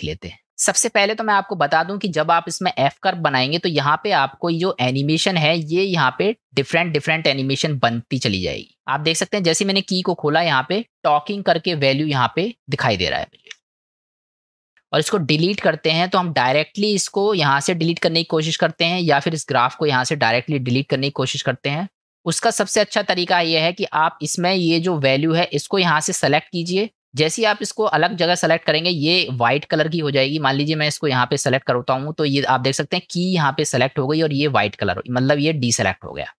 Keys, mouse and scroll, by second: 4.0 click, 17.9 click, 25.6 click, 28.3 click, 30.9 click.